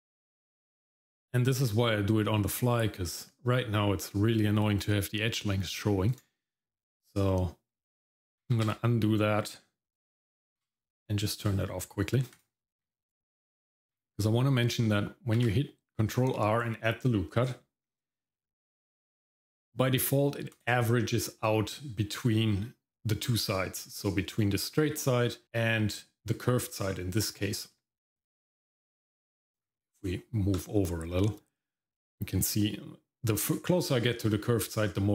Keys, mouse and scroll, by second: 8.5 ctrl+z, 10.6 q, 15.4 ctrl+r.